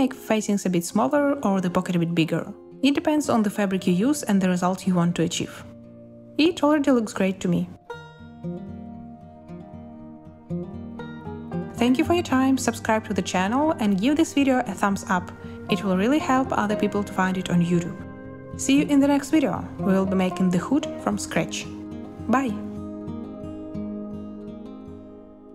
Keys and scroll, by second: 0.0-1.0 typing, 2.6 a, 5.4-7.3 typing, 12.0 space.